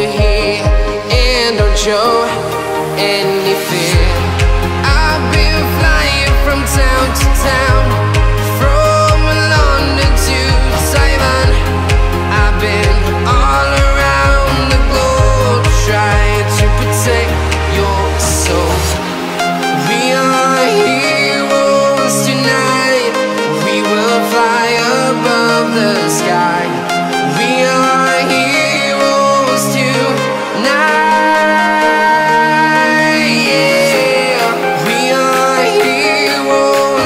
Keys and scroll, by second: 0.0 alt+super+space, 0.1-0.4 alt+super+space, 2.7 space, 3.2 space, 4.9-7.2 typing, 9.3-14.3 typing, 15.9 super+c, 24.3 super+v, 27.9 super+c, 29.1 super+c, 30.4 super+v, 31.1 ⟲, 31.8 space, 33.2 m, 35.0 a.